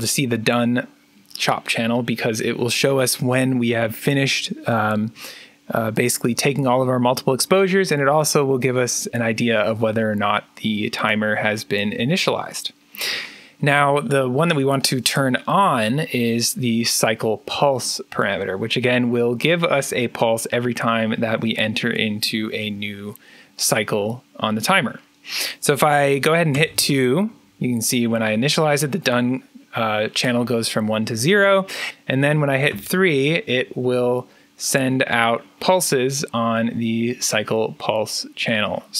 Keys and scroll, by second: 26.4 2, 32.6 3.